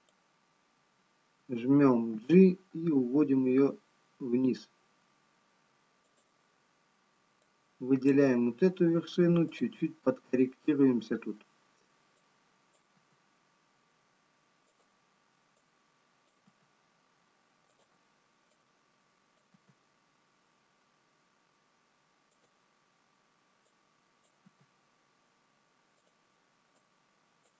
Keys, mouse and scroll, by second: 5.9 g, 7.7 click, 9.4 g, 12.2 click, 13.7 g, 15.9 click, 20.4 g, 24.0 click.